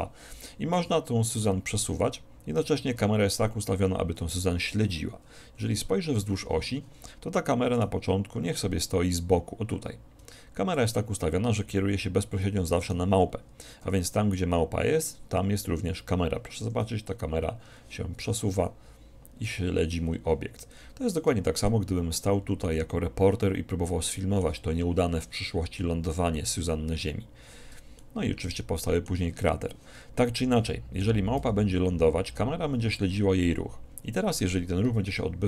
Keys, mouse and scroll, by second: 1.4 g, 5.5 KP_1, 5.8 KP_3, 7.8-9.6 right drag, 8.6-10.4 drag, 12.8-14.7 right drag, 13.9 g, 17.2-19.1 scroll up 1, 18.3 g, 19.1 middle click, 20.9-23.5 middle drag, 27.3 click, 28.2-30.0 middle drag, 31.4 g, 35.0 KP_1.